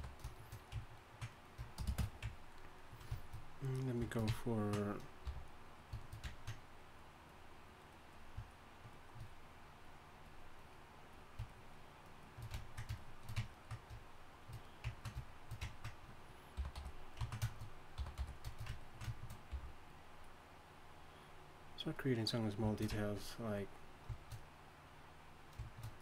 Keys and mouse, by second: 1.8 shift+space, 5.2 f, 8.4-16.5 drag, 16.5 y, 16.7 g, 18.0 y, 18.2 f, 19.5 f.